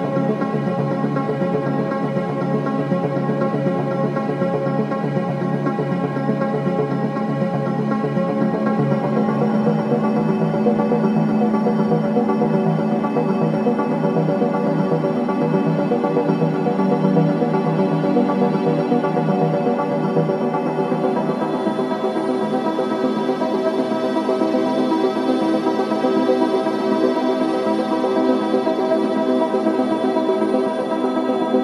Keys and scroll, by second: 1.6 ctrl+t, 25.4 ctrl+z.